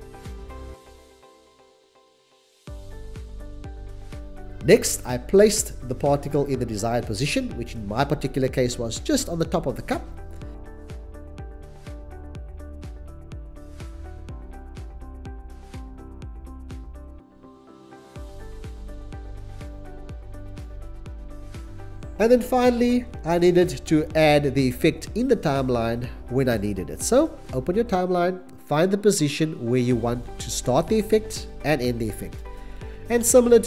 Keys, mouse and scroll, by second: 8.8 middle click, 9.4 c, 11.3 c, 12.4-13.9 typing, 12.7 Return, 13.5 Return, 15.1 c, 16.0 c, 17.2 BackSpace, 17.3 Return, 17.3 5, 17.7 c, 19.0 ctrl+s, 21.7 shift+s, 25.9 click.